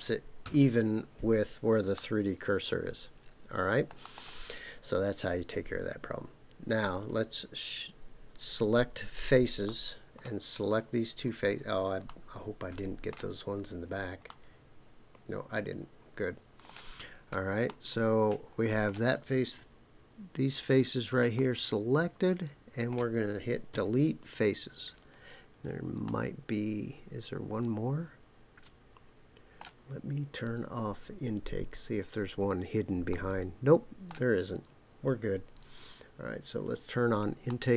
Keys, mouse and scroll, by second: 0.4 KP_Enter, 1.9-3.9 middle drag, 4.0 middle click, 7.0 click, 8.5 click, 9.6 middle click, 10.7 click, 12.0-13.1 middle drag, 13.4-14.3 scroll down 3, 14.3-16.6 middle drag, 17.2-17.6 scroll up 3, 17.6-18.9 middle drag, 20.6 shift+click, 21.3-22.9 middle drag, 23.7 Delete, 26.0-29.6 middle drag, 32.0 click, 33.1-34.1 middle drag, 36.6 click, 37.5 middle click.